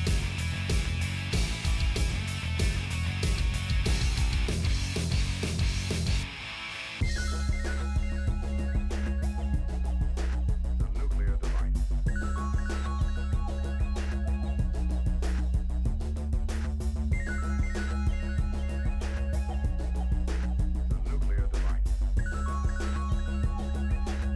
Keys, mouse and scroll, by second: 0.0 middle click, 0.1 ctrl+s, 0.3 middle click, 0.5 click, 0.7 middle click, 6.7 middle click, 7.5 ctrl+r, 9.3 middle click, 9.6 click, 10.4 ctrl+r, 13.7-14.7 middle drag, 15.0 ctrl+r, 16.5 middle click, 17.1 middle click, 17.5 click, 18.1 right click, 18.5 click, 18.8-21.7 middle drag, 21.7 right click, 22.7-24.3 drag.